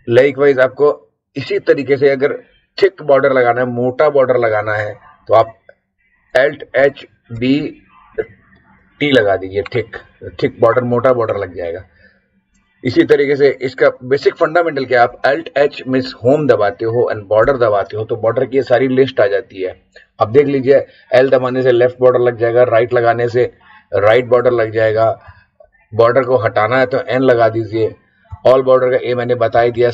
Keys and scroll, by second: 6.7 alt+h, 7.3 alt+b, 8.1 t, 15.5 alt+h, 17.4 b, 24.2 Down, 25.2 Up, 28.3 Down, 29.5 Down.